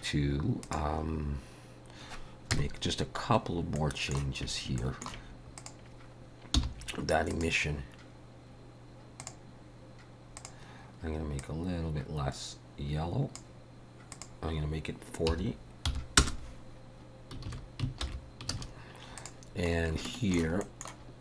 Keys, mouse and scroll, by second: 2.5 KP_0, 3.4 scroll up 3, 3.8 middle click, 4.5 scroll up 1, 4.8 shift+middle click, 5.6 click, 6.6 h, 7.3 click, 9.2 click, 10.4 click, 14.1 click, 17.5 alt+a, 18.1 alt+h, 18.6 alt+a.